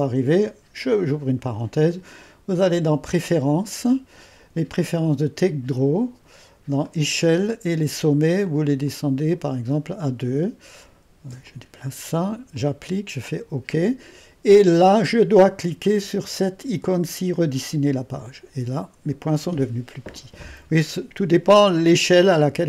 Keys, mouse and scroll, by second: 1.0-10.1 drag, 11.3 ⌨, 11.5-16.4 drag, 17.4-20.5 drag.